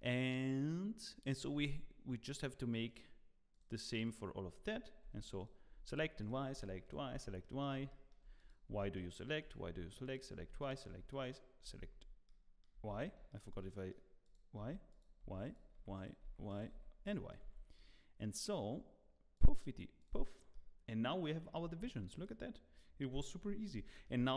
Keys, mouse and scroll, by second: 1.5 Tab, 2.8 click, 3.5 click, 4.3 click, 5.0 y, 5.4 click, 5.9 y, 6.2 click, 6.8 click, 7.4 middle click, 7.9 shift+middle click, 8.3 click, 8.7-11.6 typing, 8.9 middle click, 9.4 click, 10.0 click, 10.6 click, 11.1 click, 12.0 scroll down 2, 12.2 middle click, 21.6 click, 21.6 middle click, 21.6 scroll up 2, 21.9 shift+middle click, 22.2 middle click, 23.8 shift+middle click, 24.2-24.3 scroll up 8.